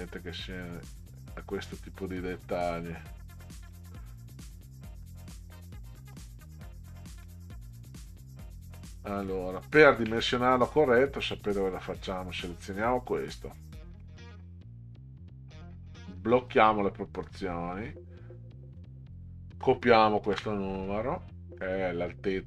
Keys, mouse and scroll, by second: 0.8-1.4 ctrl+scroll up 2, 5.1 middle drag, 6.0 middle click, 6.8-7.2 ctrl+scroll down 2, 8.7-9.2 middle drag, 9.8 ctrl+scroll down 2, 12.5 click, 16.4 click, 18.8 click, 20.3 ctrl+c.